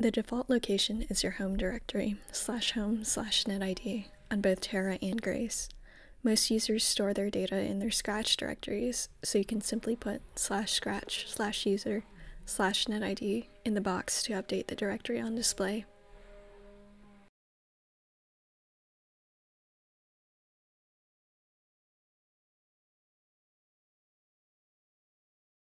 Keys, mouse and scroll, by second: 4.9-8.7 drag, 9.7-13.0 typing, 14.8 ctrl+a, 15.6 ctrl+c, 16.2 Return, 18.2 click, 19.3-20.1 typing, 21.7-22.5 typing, 24.9 click.